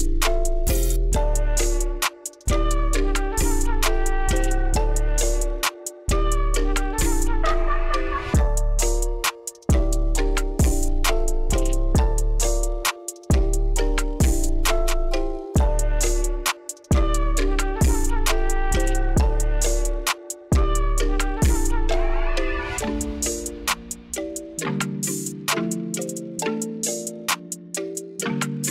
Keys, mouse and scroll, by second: 0.4 shift+click, 0.8-3.2 shift+middle drag, 6.4 shift+click, 9.1 shift+click, 13.7 shift+click, 16.7-18.0 shift+middle drag, 21.9-23.5 shift+drag, 23.9 shift+click, 25.7 shift+click, 27.0 shift+click, 28.6-28.7 shift+drag.